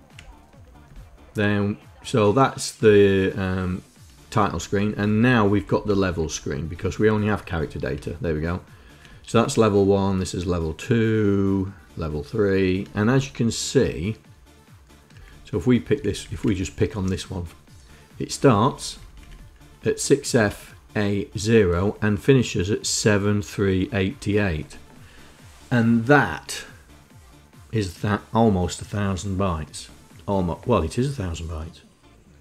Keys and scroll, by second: 0.5 Up, 2.4 Down, 4.2 Down, 4.4 Down, 4.6 Down, 4.8 Down, 4.9 Down, 5.1 Down, 5.3 Down, 5.4 Down, 5.6 Down, 5.7 Down, 5.9 Down, 6.4 Down, 7.6 Up, 9.1 Down, 12.7 Up, 14.9 Down, 15.7 Down, 15.9 Down, 16.6 Home, 18.1 Right, 18.7 Right, 20.1 Down.